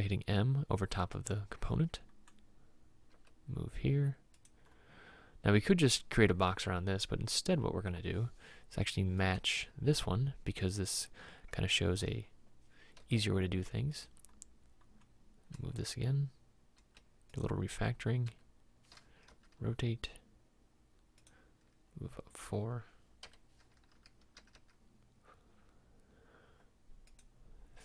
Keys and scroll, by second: 3.2 m, 13.1 m, 15.6 m, 18.2 m, 19.3 r, 23.4 m, 24.4 r, 24.6 r.